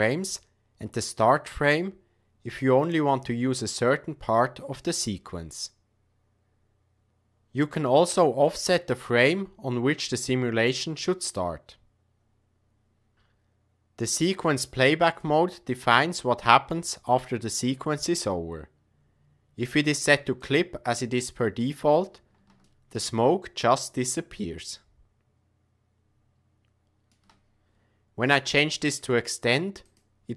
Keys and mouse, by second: 15.0-20.6 drag, 22.9-27.1 shift+drag, 28.8-30.0 drag.